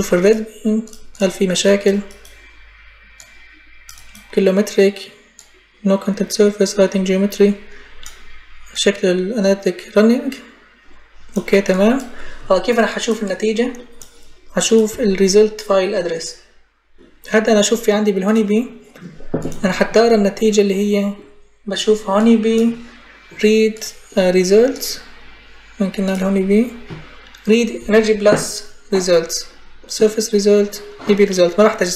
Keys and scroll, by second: 14.7 Delete.